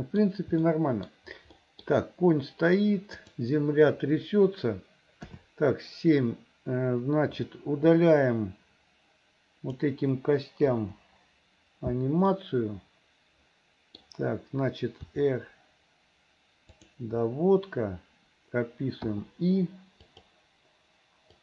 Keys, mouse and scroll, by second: 0.6 middle click, 1.5 middle click, 3.2 click, 5.3 KP_7, 7.9-9.8 drag, 10.8 Delete, 12.3-14.0 middle drag, 15.0 r, 19.1 i, 20.2 click.